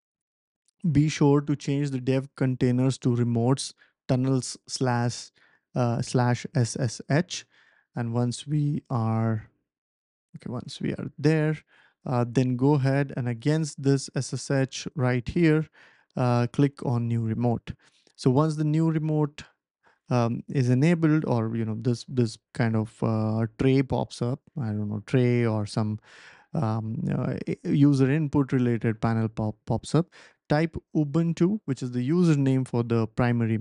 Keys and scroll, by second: 30.1-31.4 typing.